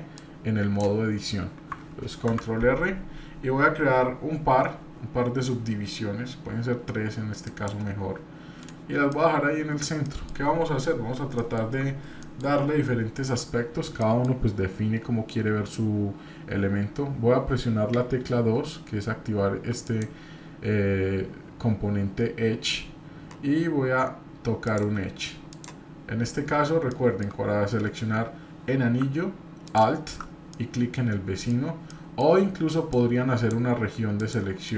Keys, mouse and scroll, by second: 9.1 middle click, 10.0 middle click, 14.0 shift+middle click, 14.0 scroll up 1, 30.5 middle click, 31.8 middle click, 31.8-32.2 scroll down 1.